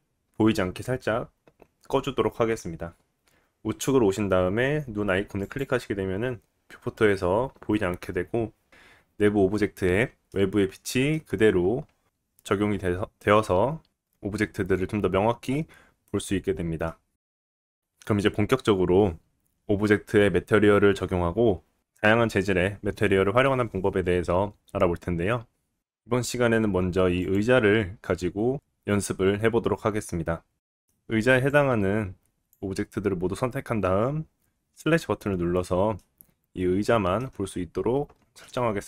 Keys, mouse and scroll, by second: 5.4 click, 5.5-27.2 middle drag, 27.2 click, 27.3-31.5 middle drag, 31.5-38.8 drag, 35.9 middle click, 37.4 scroll down 2, 38.4 middle click.